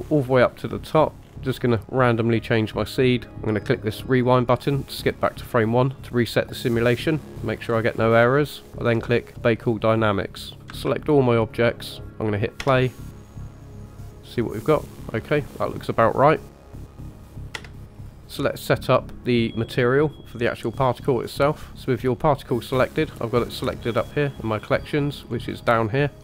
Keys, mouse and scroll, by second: 0.9-1.2 scroll down 2, 1.1-1.6 scroll up 2, 1.6-2.7 drag, 4.0 click, 7.8-8.6 scroll down 1, 8.6-9.3 scroll down 3, 9.3-10.6 drag, 9.3 scroll down 1, 10.6 a, 10.6 a, 12.6 space, 17.5 space, 17.7 scroll down 2, 17.9 click, 20.3 click, 20.9 click, 24.6-25.3 scroll down 1, 25.3-26.1 scroll down 1, 26.1 click.